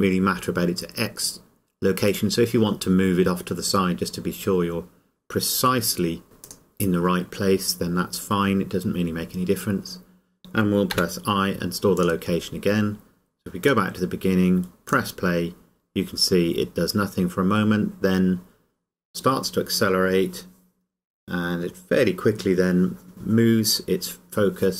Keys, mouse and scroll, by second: 2.2 click, 6.2 g, 6.7 click, 12.2 click.